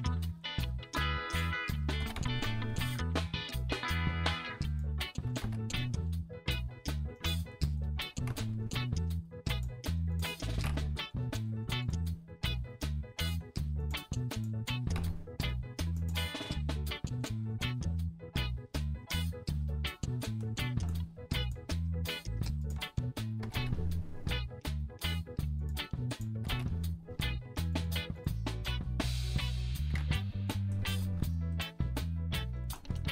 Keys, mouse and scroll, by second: 0.1 click, 0.4 click, 1.4 click, 2.0 g, 2.2 g, 3.4 click, 3.7 click, 4.8 click, 5.3 g, 5.4 g, 7.2 click, 7.5 click, 8.3 g, 9.5 click, 10.2 click, 10.5 g, 11.8 click, 11.8 g, 12.1-13.4 drag, 13.8 click, 14.3 click, 14.8 g, 15.0 g, 16.0 click, 16.3-20.4 middle drag, 20.7 shift+middle click, 21.4 middle click, 23.4 g, 23.6 g, 25.6 click, 26.2 click, 26.5 g, 27.7 click, 28.8-30.5 drag, 30.7 shift+middle click, 30.8 shift+click, 31.3 middle click, 31.8 middle click, 32.8 middle click.